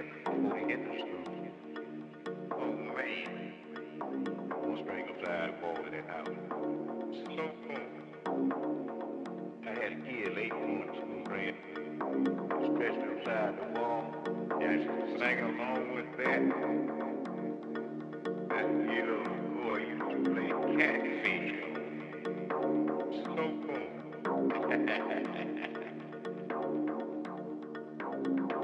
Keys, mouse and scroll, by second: 0.3 a, 2.3 ctrl+r, 5.3-9.5 middle drag, 9.5 scroll up 1, 9.6-11.7 middle drag, 9.9 z, 13.6 ctrl+z, 13.9 ctrl+z, 14.0 ctrl+z, 14.2-14.8 ctrl+z, 15.0 ctrl+z, 15.3-17.8 ctrl+z, 18.0 ctrl+z, 18.4 ctrl+z, 18.7 ctrl+z, 19.0 ctrl+z, 19.3 ctrl+z, 19.5 ctrl+z, 19.8 ctrl+z, 20.2 ctrl+z, 20.4 ctrl+z, 20.7 ctrl+z, 20.9 ctrl+z, 21.1 ctrl+z, 21.2-22.2 ctrl+z, 22.9 middle click, 24.8 KP_3.